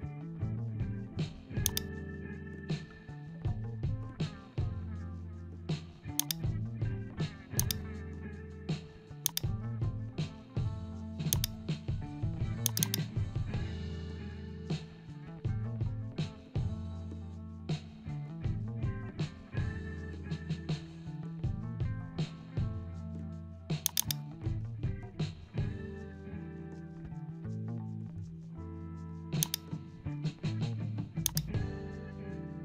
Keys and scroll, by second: 18.2 ctrl+alt+shift+e.